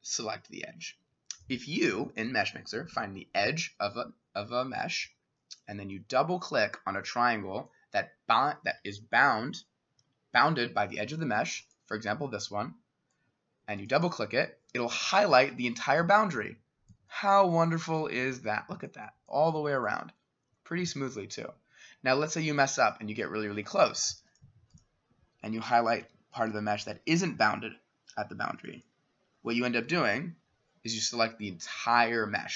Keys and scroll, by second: 9.0-16.6 [, 25.1 Escape, 26.0 s.